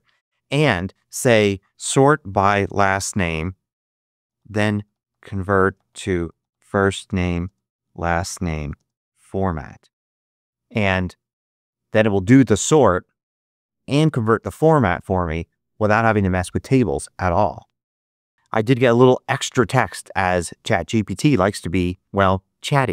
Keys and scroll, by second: 1.3-9.9 typing, 10.0 Return.